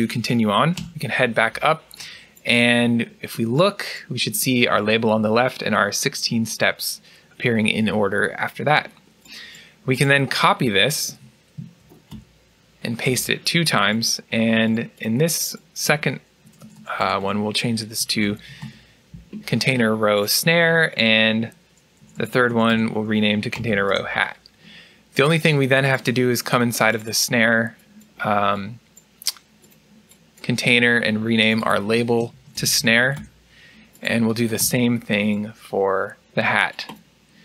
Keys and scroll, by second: 11.0 Escape, 11.7 ctrl+c, 12.0 ctrl+v, 12.9 ctrl+v, 16.3 BackSpace, 19.0 typing, 21.9 BackSpace, 24.8-25.5 typing, 34.5 typing.